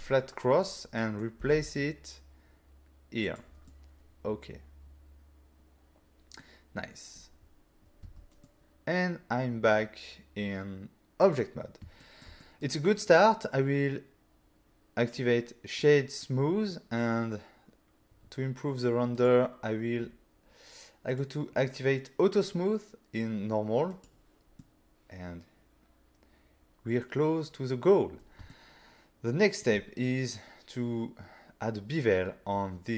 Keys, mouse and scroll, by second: 1.0 middle click, 1.4 g, 1.5 z, 3.3 click, 3.7 middle click, 8.1 Tab, 8.4 middle click, 12.0 shift+middle click, 12.4 middle click, 13.0 right click, 15.2 click, 16.3 middle click, 18.1-18.4 scroll down 1, 19.2 click, 19.2-19.9 scroll down 3, 20.0-21.1 scroll down 1, 21.1 click, 21.5 scroll down 1, 24.0 click, 24.6 middle click, 28.5 ctrl+middle click, 29.7 middle click.